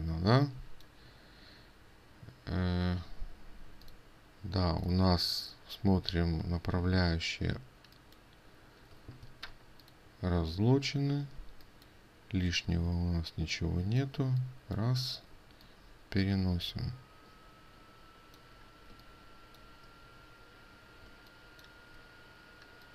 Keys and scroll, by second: 9.9 ctrl+alt+2, 13.3 ctrl+z, 21.6 ctrl+space.